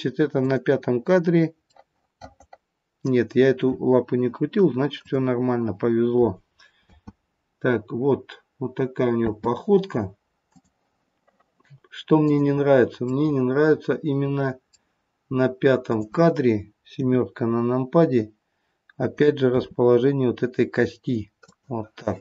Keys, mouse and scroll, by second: 0.3 click, 1.7 middle click, 3.4-4.8 scroll down 3, 5.0 click, 9.2 space, 10.5 click, 12.2 click, 13.2 middle click, 15.8 click, 17.2 KP_7, 19.5 r.